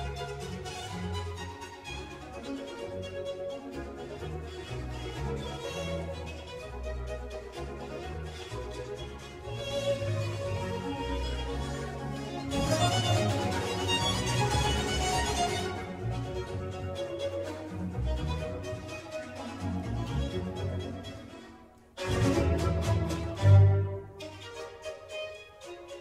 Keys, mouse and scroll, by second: 0.0 click, 4.2-7.3 drag, 10.7-13.8 drag, 16.1-21.0 drag, 23.5 click, 24.7 drag, 25.0-25.5 scroll down 2, 25.5-26.0 scroll up 1.